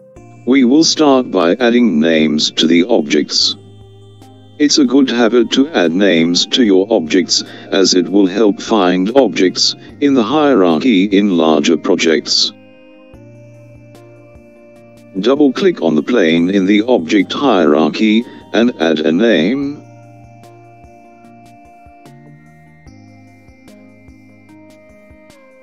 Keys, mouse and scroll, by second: 7.6 click, 9.5 click, 10.2 click, 14.9 click, 15.1-19.0 drag.